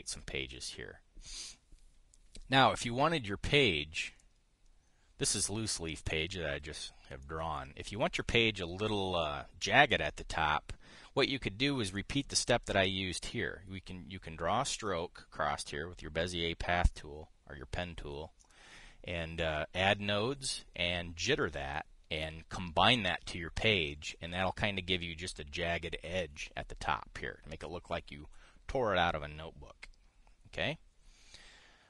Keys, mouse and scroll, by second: 4.1 click, 4.9-6.2 drag, 7.5 click, 7.9 click, 12.6 click, 19.1 click.